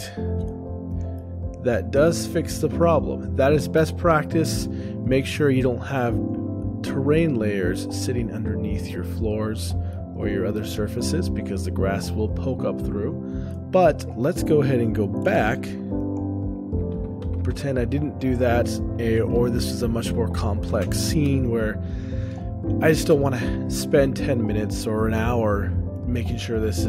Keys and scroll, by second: 1.0 shift+space, 1.1 o, 1.2 shift+space, 1.8 shift+space, 3.6 o, 4.6 shift+space, 7.4 o, 12.5 o.